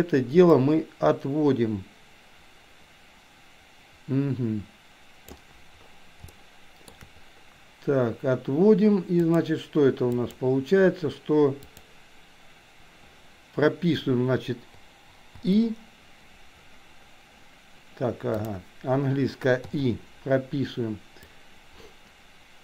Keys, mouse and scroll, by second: 0.6 click, 0.8-5.6 drag, 6.4 shift+middle click, 9.2 click, 10.2 click, 11.8-13.2 drag, 15.3 i, 18.4 click, 21.4-22.6 drag.